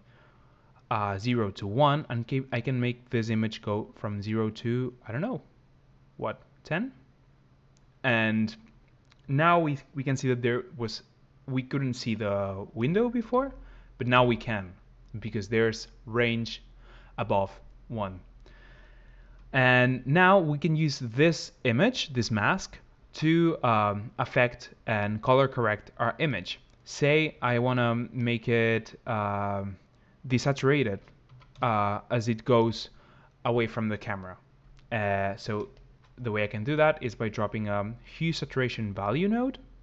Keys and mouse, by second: 3.5 click, 13.1 m, 13.9 m, 26.1 middle click, 28.0-29.7 middle drag, 29.7 click, 29.8-35.4 middle drag, 35.8-38.9 middle drag.